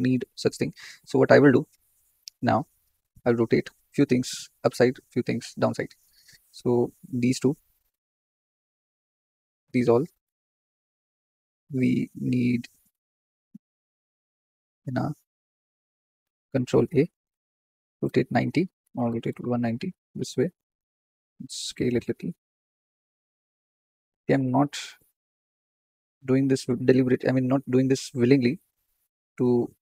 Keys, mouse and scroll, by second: 0.4 scroll down 3, 6.0 click, 8.9 shift+click, 9.7 shift+click, 16.8 ctrl+l, 17.5 r, 18.9 r, 21.3 s, 22.2-23.6 shift+middle drag, 23.6 g, 26.0 click, 28.2 click, 29.3 ctrl+l.